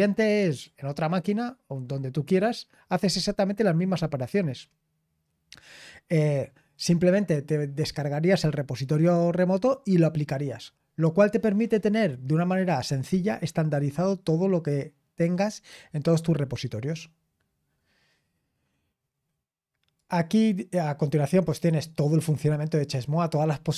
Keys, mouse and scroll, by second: 0.4 click, 19.9-22.9 drag, 22.9-23.7 scroll down 2.